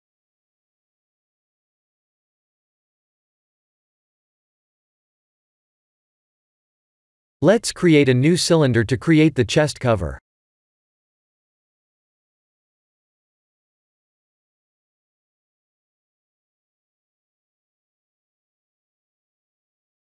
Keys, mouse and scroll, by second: 6.5 click, 7.6 shift+a, 12.8 r, 16.3 click, 17.4 KP_3, 19.4 click.